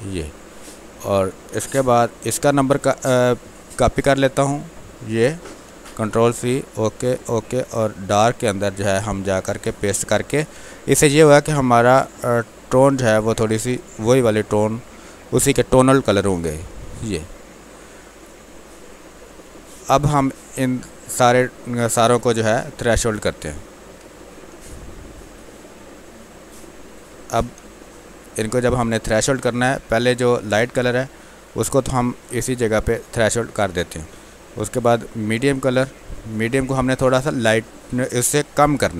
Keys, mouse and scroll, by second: 5.5 ctrl+c, 6.3 click, 10.4 ctrl+v, 11.5-16.2 drag, 16.2 Return, 22.7 F12, 25.3-27.5 drag, 27.5 space, 27.7 ctrl+click, 28.6 click, 28.8 alt+click, 29.1 alt+click, 30.1 click, 32.2 F12, 33.4 click.